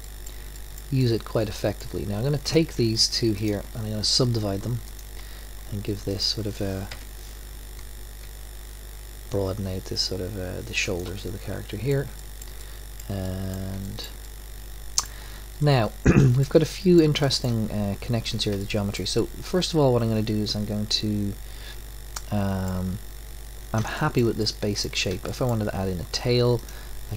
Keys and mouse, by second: 1.5 right click, 3.0-4.8 drag, 5.1 click, 6.8 click, 6.9 KP_1, 8.2 g, 14.4 middle click, 17.0 middle click, 18.8 middle click, 20.0 middle click, 20.6 middle click, 21.1 middle click, 22.3-26.6 middle drag, 26.6 click.